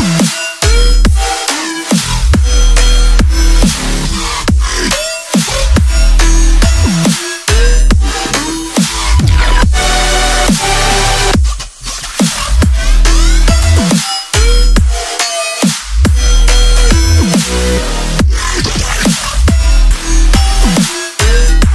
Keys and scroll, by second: 1.7 ctrl+z, 3.6 ctrl+z, 4.3 ctrl+z, 6.8 ctrl+z, 8.4 ctrl+z, 11.2 ctrl+z, 12.2-14.9 typing, 16.1 i, 17.6 x, 18.1 u, 18.7 ctrl+z, 19.0 i, 20.0 x, 21.6 ctrl+z.